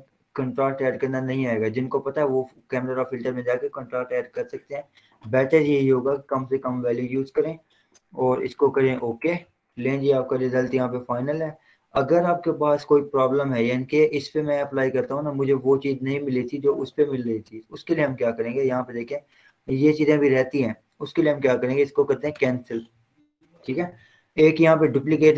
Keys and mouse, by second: 5.5 click, 5.8-6.5 typing, 9.1 click, 12.8 click, 15.1 click, 18.1 click, 22.3 click.